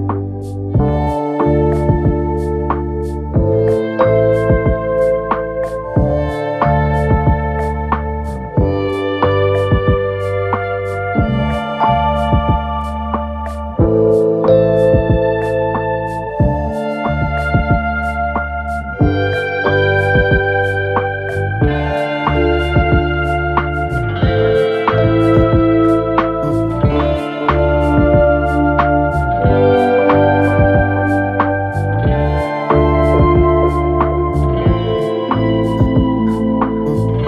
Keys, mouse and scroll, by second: 0.3 g, 2.2 click, 2.3 click, 2.6 g, 6.3 click, 6.7 g, 8.9 click, 9.0 click, 9.3 g, 11.7 click, 12.0 g, 13.2-13.6 scroll down 1, 13.6 KP_3, 14.5-15.0 scroll down 2, 15.0 Tab, 15.4-16.4 middle drag, 16.4 KP_1, 17.1 scroll up 2, 17.3 Tab, 18.1 KP_3, 18.8 2, 19.5 click, 20.4 KP_1, 21.6 e, 23.9 s, 25.7 KP_3, 27.3 click, 29.4 click, 30.7-31.5 scroll down 2, 31.5-32.4 scroll up 2, 32.4 1, 34.0-34.3 scroll down 2, 34.3-35.9 middle drag, 35.9 KP_3.